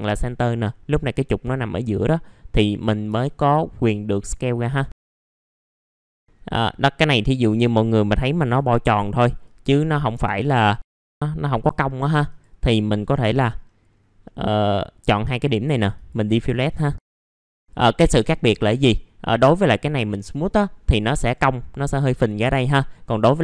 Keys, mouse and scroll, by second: 3.0 w, 3.9 click, 4.9 middle click, 5.1 scroll up 1, 5.2 middle click, 5.6 click, 6.0 middle click, 7.6 click, 10.3 click, 10.9 scroll up 1, 11.1 click, 11.8 middle click, 12.2 click, 13.4 middle click, 13.5-13.9 scroll down 1, 13.9-14.2 scroll up 1, 14.2 middle click, 15.9 click, 17.9-18.3 scroll down 1, 18.7-19.3 scroll up 1, 19.3-20.3 drag, 21.2 right click, 22.4-22.7 scroll down 1, 22.7 middle click, 23.1-23.4 scroll up 1.